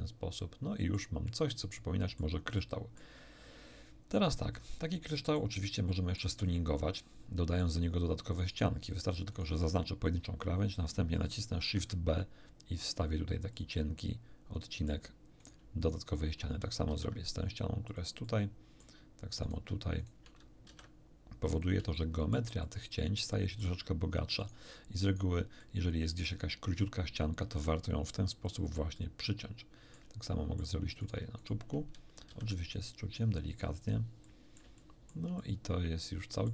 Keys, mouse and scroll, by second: 1.2-2.3 middle drag, 2.5 middle click, 4.1-5.5 middle drag, 5.8 middle click, 6.9 middle click, 8.4 right click, 9.2 shift+right click, 11.6 ctrl+b, 13.5 click, 14.0-15.0 middle drag, 15.4 shift+right click, 15.8 shift+right click, 16.8 ctrl+shift+b, 17.8 click, 18.2 middle click, 19.4 right click, 20.0 shift+right click, 20.6 ctrl+shift+b, 21.5 ctrl+click, 21.9 ctrl+shift+middle click, 22.8 ctrl+shift+middle click, 24.4 shift+right click, 25.6 shift+middle click, 27.4 ctrl+b, 28.4 ctrl+click, 28.9-30.1 middle drag, 30.3 shift+middle click, 31.0 shift+right click, 31.4 shift+right click, 32.2 ctrl+shift+b, 33.8 click, 34.3 shift+middle click, 35.4-36.5 shift+middle drag.